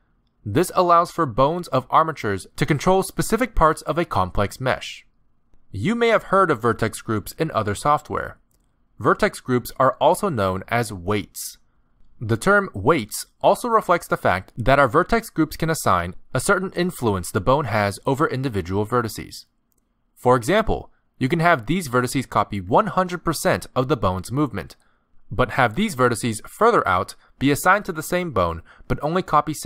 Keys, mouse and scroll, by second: 1.3 KP_Decimal, 1.8-2.2 scroll down 5, 2.1 middle click, 2.5 r, 3.7 middle click, 4.6 scroll down 1, 5.2 scroll down 3, 5.5 shift+middle click, 6.7 scroll down 2, 6.9 middle click, 7.8 click, 8.3 shift+middle click, 9.2 click, 9.7 r, 11.5 middle click, 12.1 r, 12.9 r, 15.3 ctrl+Tab, 16.0 shift+click, 17.1 click, 19.0 shift+middle click, 19.0 scroll up 4, 19.8 ctrl+click, 21.0 ctrl+click, 21.3 scroll up 3, 21.6 shift+middle click, 23.1 r, 25.5 middle click, 27.4 r.